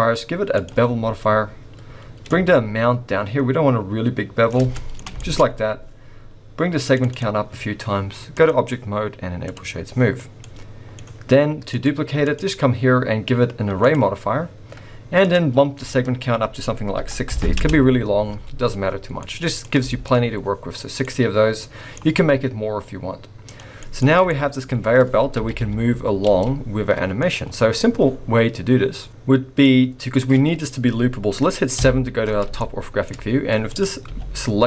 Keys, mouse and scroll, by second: 2.3 shift+click, 4.7 middle click, 5.1-7.1 shift+scroll up 3, 5.2 shift+middle click, 7.1 click, 7.1-7.9 scroll up 2, 10.3 scroll down 2, 10.4 middle click, 11.7 click, 12.2 click, 15.2 click, 18.5-19.8 scroll down 15, 19.2 middle click, 19.9 shift+middle click, 20.1-21.0 shift+scroll up 2, 21.0 middle click, 23.5 click, 23.8 middle click, 24.2-25.4 scroll up 5, 24.2 shift+middle click, 25.4 g, 28.1-28.4 scroll down 4, 29.1 middle click, 29.7-31.8 scroll up 1, 31.8 KP_7, 32.6 shift+middle click, 33.2-33.7 scroll up 1, 33.7 click, 34.1 g.